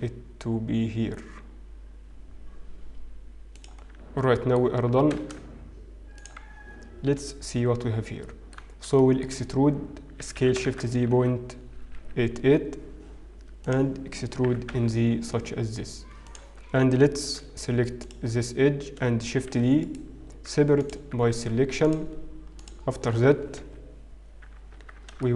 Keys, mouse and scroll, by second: 4.5 middle click, 4.5-6.5 scroll down 3, 6.5 s, 9.9 shift+middle click, 9.9-11.1 scroll up 6, 11.1 e, 14.6 e, 18.0 alt+click, 20.7 shift+d, 20.7 p, 22.1 Tab, 22.1 click, 22.6 click, 23.6 KP_1.